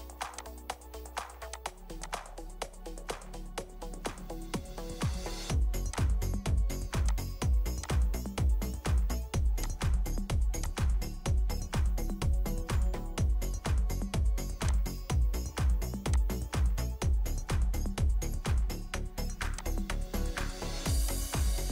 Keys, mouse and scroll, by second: 3.2 4, 3.6 Return, 4.6-6.0 scroll up 1, 8.2-9.6 scroll up 1, 12.0 Escape.